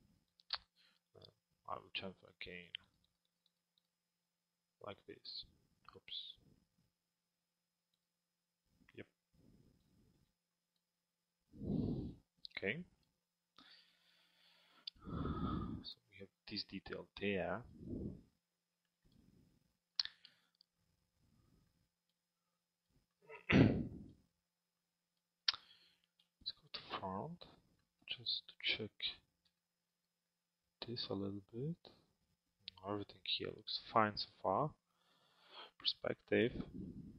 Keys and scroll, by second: 25.9 f, 35.1 p.